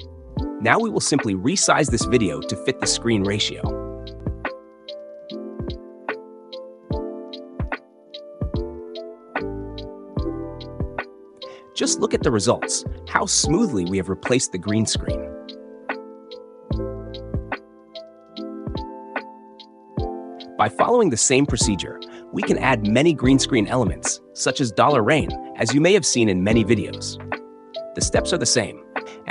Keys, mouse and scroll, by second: 4.6 drag, 5.4 click, 6.7 drag, 7.5 click, 7.8 drag, 10.7-12.5 drag, 13.2 click, 20.8 Escape, 22.3-24.1 drag, 25.1 click, 26.8-27.8 drag, 28.2-28.7 drag.